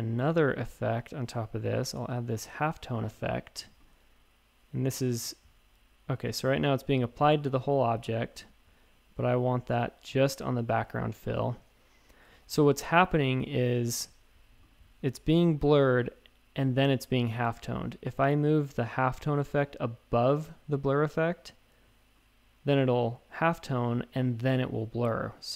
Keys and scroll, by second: 7.5 shift+super+a, 8.0 a, 12.3 shift+super+a, 14.5 a.